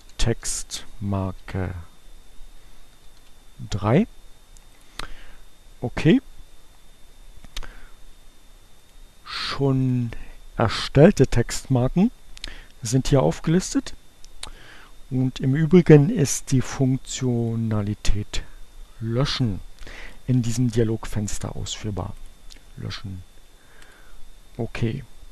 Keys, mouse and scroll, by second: 0.0-1.3 typing, 2.6 BackSpace, 3.2 3, 4.6 click, 8.7 click, 9.8 click, 15.8 click, 18.1 click, 20.6 click, 23.4 click.